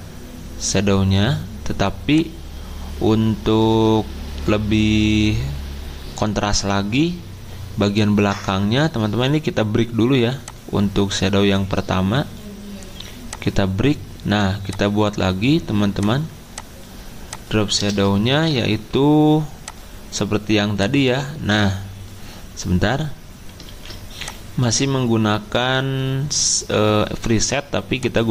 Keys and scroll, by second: 18.3 ctrl+z, 23.7 ctrl+z.